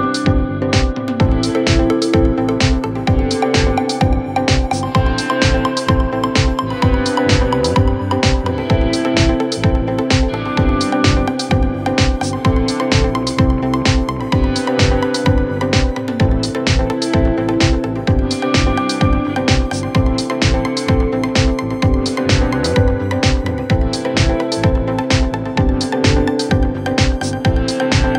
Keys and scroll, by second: 1.7 f, 4.3 shift+F2, 4.8 Escape, 5.5 d, 15.7 f, 16.3 F3, 18.1 Escape, 27.6 g.